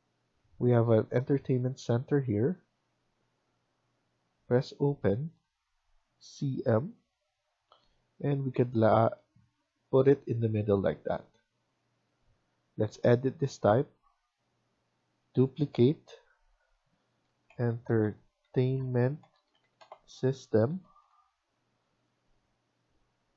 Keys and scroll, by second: 10.1 Escape, 10.1 typing, 10.4 Escape, 10.6 Escape, 17.2-18.9 typing, 20.2 typing, 22.7 typing.